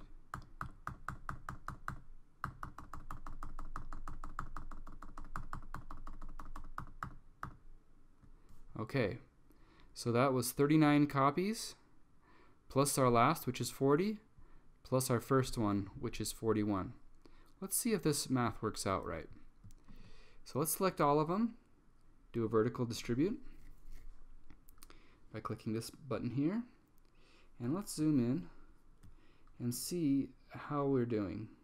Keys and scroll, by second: 0.0 super+v, 0.5 super+v, 4.2 super+v, 4.8 super+v, 5.3 super+v, 6.0 super+v, 6.5 super+v, 7.1 super+v, 7.7 super+v.